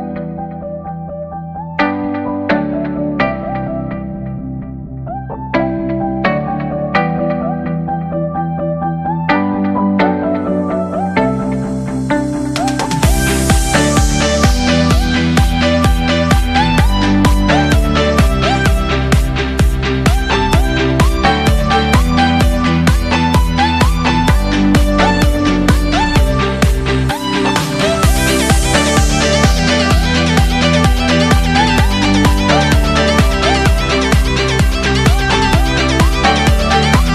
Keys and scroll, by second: 0.6 ctrl+z, 2.3 ctrl+-, 2.6 space, 2.8 ctrl+=, 3.5 space, 8.8 ctrl+-, 9.2 space, 9.3 ctrl+=, 9.5 space, 11.1 space, 14.1 space, 14.5 ctrl+-, 15.3 ctrl+=, 18.5 space, 22.2 ctrl+=, 22.7 ctrl+=, 24.0 space, 24.4 ctrl+=, 30.1 space, 30.8 ctrl+=, 32.2 ctrl+=, 34.0 ctrl+=, 36.0 ctrl+-, 36.6 ctrl+=.